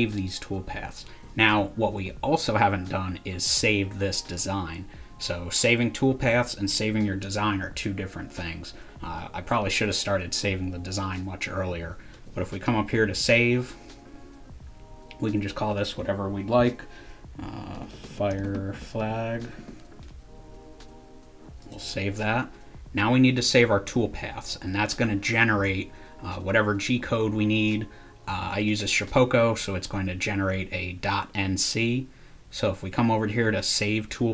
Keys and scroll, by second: 17.5-20.0 typing.